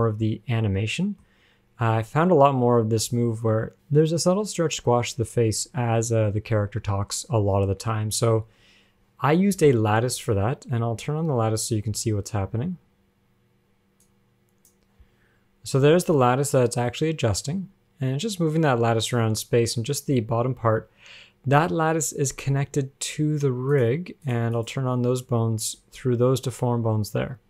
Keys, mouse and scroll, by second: 0.1 shift+middle click, 1.2 shift+middle click, 1.5 scroll up 1, 3.3 g, 10.3-12.8 scroll down 14, 12.8-14.3 scroll down 5, 14.3 click, 15.3-16.0 scroll down 1, 16.0 scroll down 1, 16.0 g, 22.5-23.5 scroll up 16, 24.0 shift+click, 24.5 shift+click, 24.8 shift+click, 26.0 g.